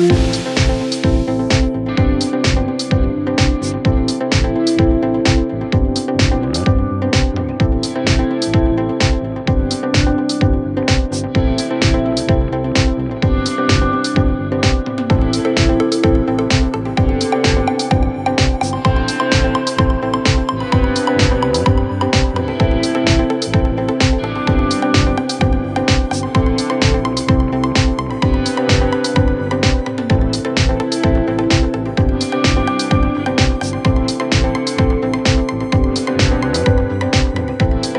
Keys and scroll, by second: 17.2 F9, 21.2 F1, 23.8 Escape, 25.5 F9, 27.7 Escape, 30.6 shift+z, 30.6 c, 32.8 F1.